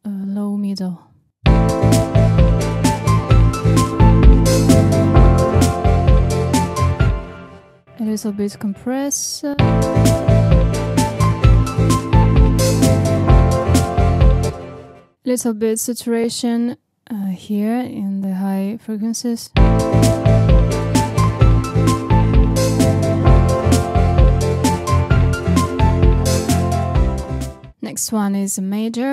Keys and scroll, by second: 1.3 space, 7.0 space, 9.4 space, 14.4 space, 19.4 space.